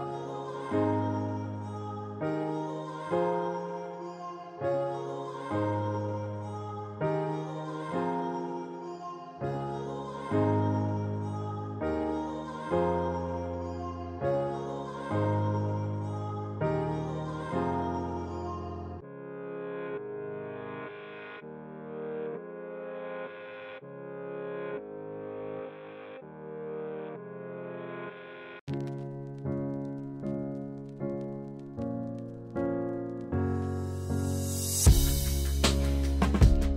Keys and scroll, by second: 7.1 ctrl+z.